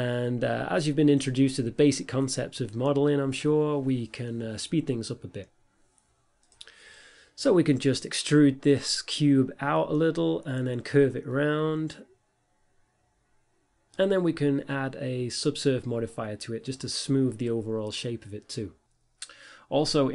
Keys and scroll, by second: 0.0 x, 1.7-5.1 typing, 5.6 Tab, 6.4-12.2 typing, 14.0-16.5 typing, 16.0 Return, 16.8 Tab.